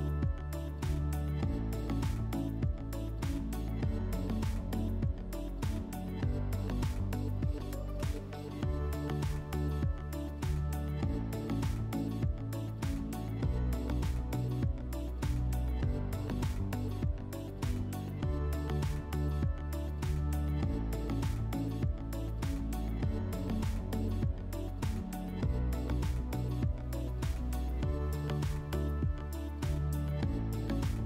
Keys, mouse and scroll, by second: 1.3 alt+w, 4.2 click, 5.3 click, 8.4 click, 10.7 click, 12.1 right click, 12.7 right click, 13.9 w, 16.0 click, 17.4 click, 17.9 right click, 18.8 click, 20.4 click, 21.0 click, 21.7 Delete, 22.7 click, 23.5 click, 24.3 alt+w, 27.5 click, 29.9 click.